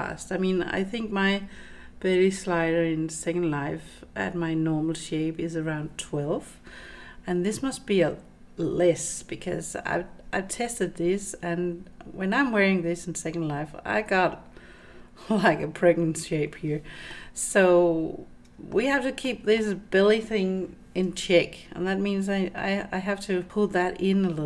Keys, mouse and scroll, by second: 17.2-18.8 middle drag, 19.3 middle click, 21.0 Tab, 23.5 Tab, 23.5 click.